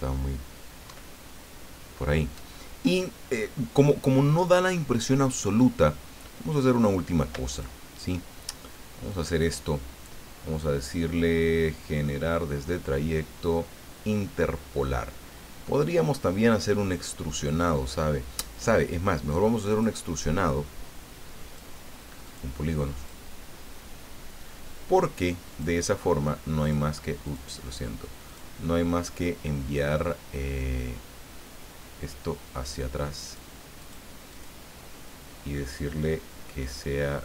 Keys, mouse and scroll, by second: 0.8 alt+Down, 2.9 click, 6.7 click, 7.5 shift+click, 9.1 click, 19.7 click, 21.4 click, 22.2 click, 23.0 click, 25.5 click, 26.6 click, 27.3 click, 28.3 click, 33.2 click, 33.8 click, 34.3 click.